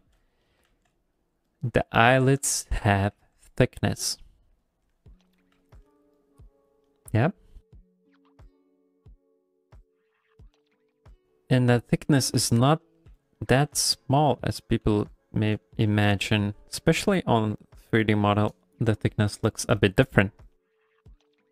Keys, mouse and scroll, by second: 0.0 f, 0.4 middle click, 0.7 f, 1.2 click, 1.5 click, 2.1 click, 2.4 shift+middle click, 2.7 middle click, 3.1 f, 3.6 click, 3.8 click, 4.1 middle click, 4.6 click, 4.9 middle click, 5.2 middle click, 5.5 f, 5.8 middle click, 6.2 click, 6.5 click, 6.8 middle click, 7.4 click, 7.8 click, 8.0 click, 8.2 middle click, 8.5 f, 8.9 click, 9.2 click, 9.5 middle click, 10.0 click, 10.4 middle click, 11.2 click, 11.7 middle click, 12.1 middle click, 12.5 ctrl+middle click, 12.8 middle click, 13.1 f, 13.4 middle click, 13.7 f, 14.2 click, 14.5 middle click, 14.8 f, 15.3 click, 15.6 middle click, 16.0 ctrl+middle click, 16.2 middle click, 16.9 ctrl+middle click, 17.1 middle click, 17.6 ctrl+middle click, 17.9 middle click, 20.5 ctrl+middle click, 20.8 middle click, 21.0 ctrl+middle click, 21.4 middle click.